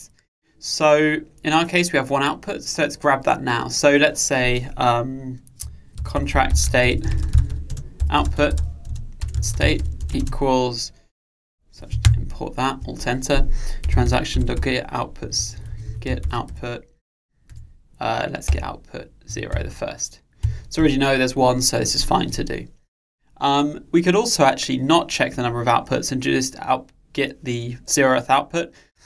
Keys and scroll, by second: 12.1 alt+Return, 17.6 Return.